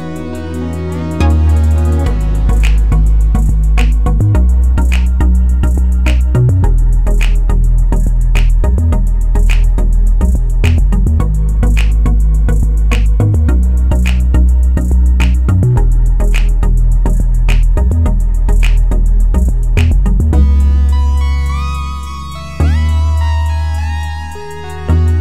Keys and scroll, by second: 14.2 Escape, 19.7-20.5 typing, 22.7 1, 23.7 BackSpace, 24.3 2, 24.6 Return.